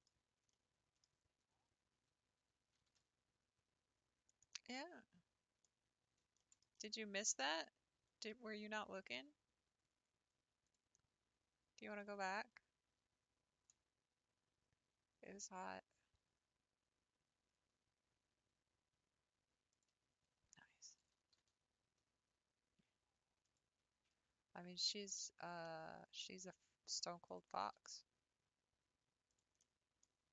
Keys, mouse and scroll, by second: 0.0-0.4 scroll down 3, 0.4 scroll up 1, 0.6-1.6 middle drag, 1.6 a, 2.8 g, 4.7-6.0 middle drag, 6.0-6.4 scroll up 2, 6.4-9.5 shift+middle drag, 9.5-9.9 scroll up 1, 10.7 click, 12.1 click, 13.8-14.5 scroll up 2, 19.8 click, 21.2 g, 25.7 middle click, 26.1 scroll down 3, 27.4 click, 27.7 g, 29.6 middle click, 30.1 scroll down 1.